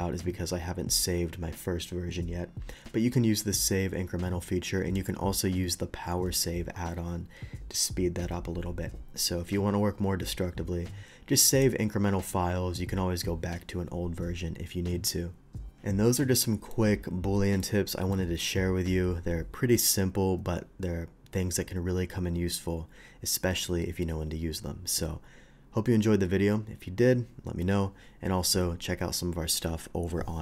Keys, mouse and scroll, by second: 11.5 click, 16.2-16.7 middle drag, 17.6-18.1 middle drag.